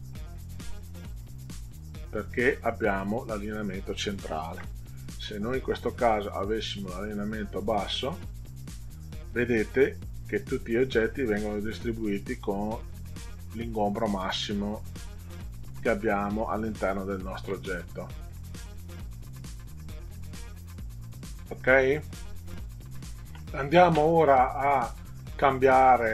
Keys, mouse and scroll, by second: 4.5 ctrl+z, 6.6 click, 7.9 click, 18.4 click, 19.5 click.